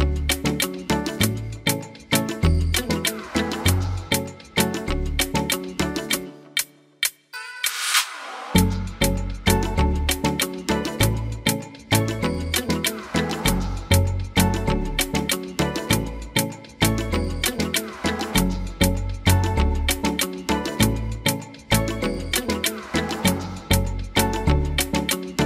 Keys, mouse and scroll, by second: 0.5 g, 2.7 click, 3.5 e, 11.4 g.